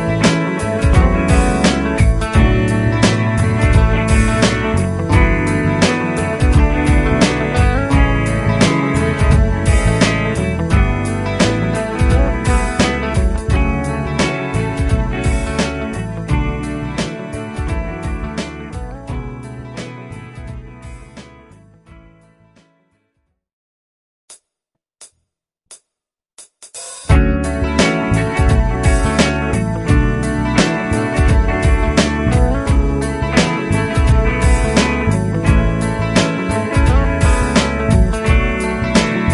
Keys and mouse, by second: 0.3 shift+click, 8.5 Up, 8.7 Up, 9.5 Down, 17.6 right click, 19.4 Up, 19.8 Up, 21.4 Delete, 22.4 Delete, 27.7 Down, 34.0 shift+click, 35.9 shift+click, 36.9 typing.